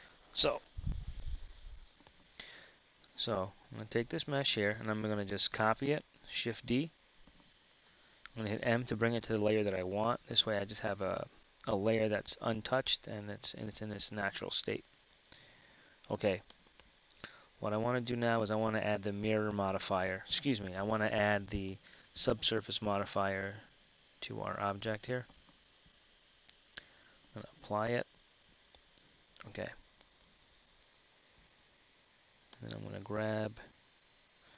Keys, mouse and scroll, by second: 2.8 Tab, 3.9 a, 6.6 shift+d, 8.7 m, 13.1-20.8 drag, 28.4 Tab, 28.4 click, 29.2 Tab, 31.6 z, 33.4 KP_1.